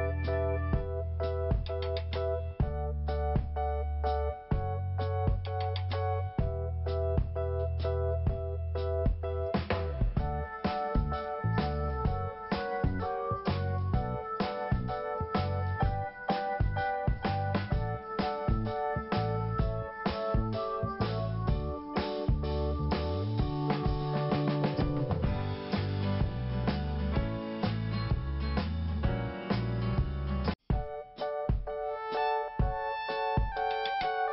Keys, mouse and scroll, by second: 0.5 click, 5.1 click, 6.6 click, 8.5 click, 9.5 click, 9.6 click, 10.7 click, 10.8 click, 10.9 click, 11.0 click, 12.9 click, 16.7 click, 16.8 click, 18.1 click, 21.4 click, 23.8 scroll down 2, 25.7 click, 25.9 click, 30.1 click, 33.2 click, 34.0 click.